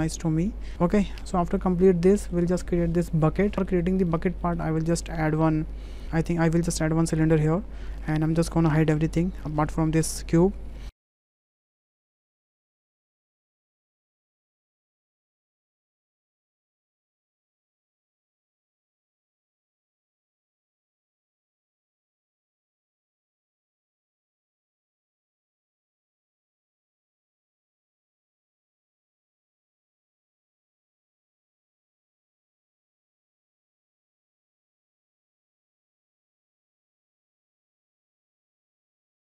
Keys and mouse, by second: 0.0 Delete, 0.5 click, 0.7 alt+h, 0.8 click, 1.3 drag, 2.2 shift+click, 3.0 shift+click, 3.6 shift+middle click, 4.1 shift+middle click, 4.8 shift+a, 9.0 shift+h, 10.9 shift+click, 11.0 ctrl+click, 11.1 Tab, 11.2 3, 11.4 Delete, 11.6 click, 11.7 Delete, 11.8 drag, 11.9 shift+click, 12.0 2, 13.2-13.6 ctrl+shift+drag, 13.7 ctrl+b, 14.2 Delete, 14.8 ctrl+z, 14.9 ctrl+z, 15.3 Tab, 15.6 Tab, 15.6 click, 16.2 ctrl+b, 16.7 shift+3, 16.8 shift+d, 16.9 p, 17.1 Tab, 17.7 shift+click, 17.9 Tab, 18.3 Tab, 18.3 a, 18.7 alt+e, 18.8 Tab, 19.5 ctrl+j, 19.7 h, 19.9 Tab, 20.2 2, 20.4 alt+shift+click, 21.5 ctrl+click, 21.7 ctrl+b, 22.0 3, 22.1 Delete, 22.4 a, 22.5 click, 22.7 alt+e, 23.4 Tab, 24.3 shift+a, 24.7 Tab, 24.8 f, 24.9 Tab, 24.9 click, 25.2 Tab, 25.3 e, 25.5 Tab, 25.5 s, 25.7 middle click, 25.8 shift+middle click, 25.9 middle click, 26.0 click, 26.1 shift+middle click, 26.3 shift+middle click, 26.5 shift+middle click, 26.9 shift+a, 27.4 s, 27.5 click, 27.8 middle click, 28.0 click, 28.4 click, 28.6 click, 29.2 click, 29.2 w, 29.6 ctrl+middle click, 29.9 click, 30.2 ctrl+shift+a, 30.2 shift+middle click, 30.5-31.2 middle drag, 31.3 click, 31.6 ctrl+z, 31.6 click, 32.3 click, 32.5 middle click, 33.0 ctrl+click, 33.0 Tab, 33.1 click, 33.8 click, 34.0 ctrl+b, 34.4 Tab, 34.5 click, 34.5-37.8 typing, 35.0 click, 35.4 click, 36.0 click, 36.5 click, 36.7 Tab, 36.8 click, 37.2 click, 37.5 Tab, 37.8 click, 38.5 alt+h, 38.5 click, 38.6 drag, 38.9 shift+drag.